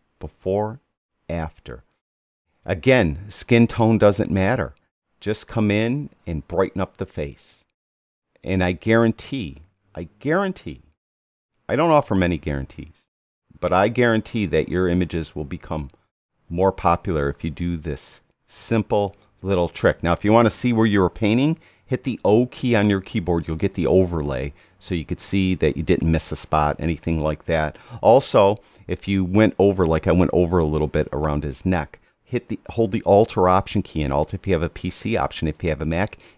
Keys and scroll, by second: 1.1 \, 1.9 Right, 22.3 o.